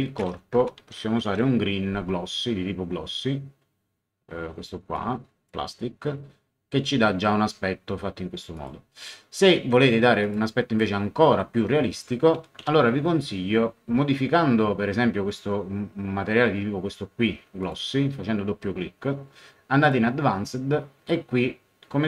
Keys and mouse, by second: 0.0-1.8 typing, 0.5 shift+Home, 4.9 click, 8.5 click, 10.2 click, 12.6 a, 17.6 click, 19.8 click.